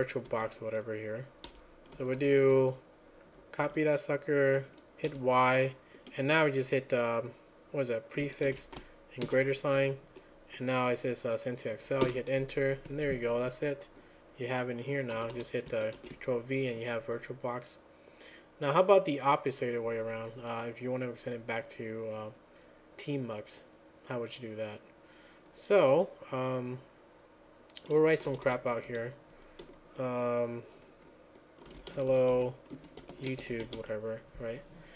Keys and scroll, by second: 0.0-3.8 typing, 4.9-5.6 typing, 9.3 ctrl+a, 9.3 >, 13.5 Return, 15.2 Return, 15.4 Return, 16.0 ctrl+v, 28.5 Return, 28.9 Return, 31.6-34.3 typing.